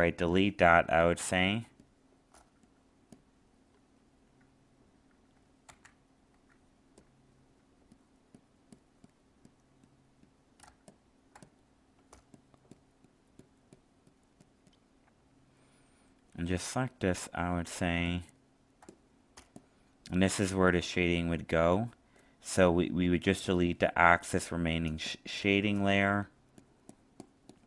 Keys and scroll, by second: 0.8 alt+space, 5.6 ctrl+z, 10.6 alt+space, 17.8 alt+space.